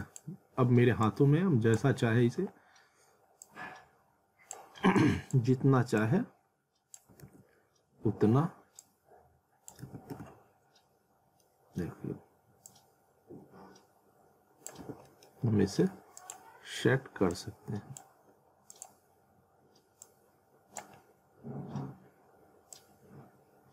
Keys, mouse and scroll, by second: 0.0 click, 7.2 ctrl+z, 8.8 click, 9.8 ctrl+z, 10.8-11.4 scroll up 1, 11.4 middle click, 12.7 click, 14.8 z, 15.1 middle click, 15.4-15.8 scroll up 1, 16.2 click, 18.4-18.7 scroll up 1, 18.7 click, 19.1 scroll up 1, 20.0 click, 21.0 scroll down 1, 22.7 click.